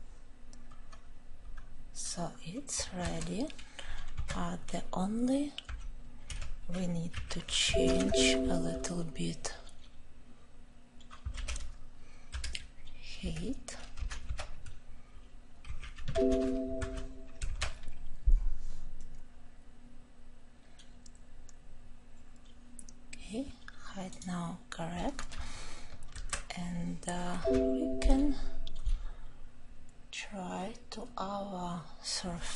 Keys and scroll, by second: 11.2 ctrl+;.